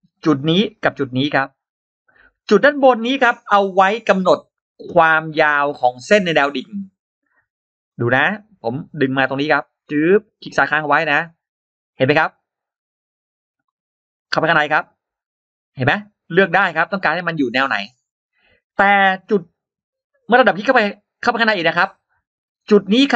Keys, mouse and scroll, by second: 0.9 shift+click, 1.9-3.6 shift+drag, 3.6 shift+x, 4.2-5.3 shift+drag, 5.7 shift+click, 6.5 shift+right click, 6.7 shift+right click, 7.8 middle click, 9.3-10.6 drag, 10.9 click, 11.3 click, 11.8-12.1 scroll down 2, 12.9-13.2 scroll down 2, 14.0 click, 14.3 click, 15.0-18.1 drag, 18.4-19.8 drag, 20.1 click, 22.2-22.6 scroll up 2.